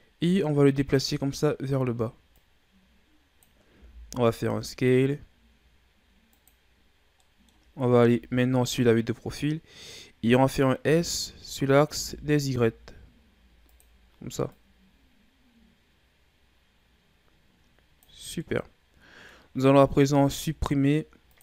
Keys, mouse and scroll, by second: 1.3-2.3 shift+scroll down 3, 2.3-3.7 drag, 3.7 s, 7.2 middle click, 8.1 KP_3, 9.8-10.2 scroll up 2, 10.8 s, 14.5-17.6 drag, 18.4-20.1 middle drag, 20.1 ctrl+Tab.